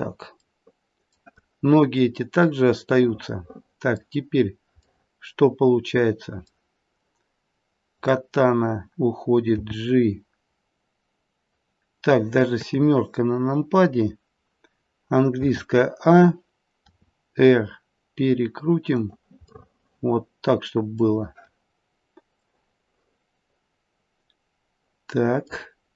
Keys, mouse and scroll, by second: 1.1 middle click, 2.3 middle click, 2.9 middle click, 3.2 middle click, 3.4 middle click, 3.9 middle click, 5.0 middle click, 6.1 middle click, 7.9 click, 9.5 g, 10.6 middle click, 12.5 KP_7, 14.1 scroll down 1, 15.3 a, 16.7 r, 19.5 middle click, 21.8-22.4 scroll up 1, 22.4 middle click, 22.4-23.0 scroll up 2, 25.6-25.9 scroll down 2.